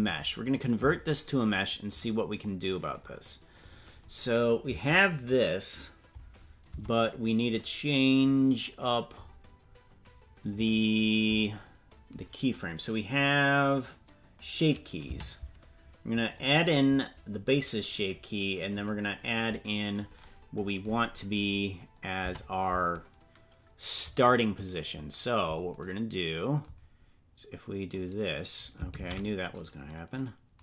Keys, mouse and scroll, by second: 2.4-3.6 scroll up 3, 6.7 Tab, 10.7 right click, 15.1 Tab, 16.3 click, 18.7 click, 21.7-22.2 scroll up 2, 22.2 Tab, 24.6-25.7 right drag, 27.9 click, 29.0 ctrl+z.